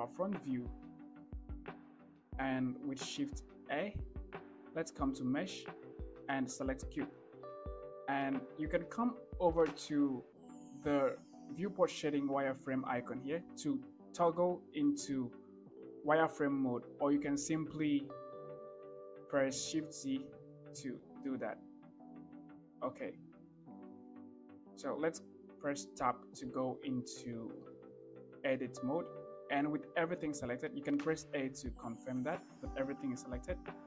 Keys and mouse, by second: 0.8 shift+middle drag, 1.7 shift+middle click, 3.1 shift+a, 14.2 click, 17.0 shift+middle drag, 19.6-21.7 typing, 23.5 shift+middle click, 25.7 Tab, 27.2 shift+middle click, 30.7 a.